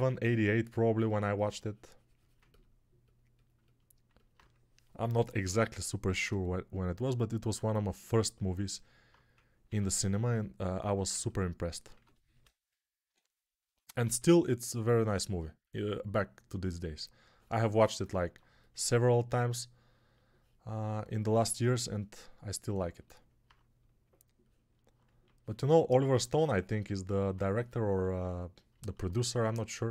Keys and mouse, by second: 6.0 shift+r, 9.7 ctrl+r, 11.8-14.0 typing.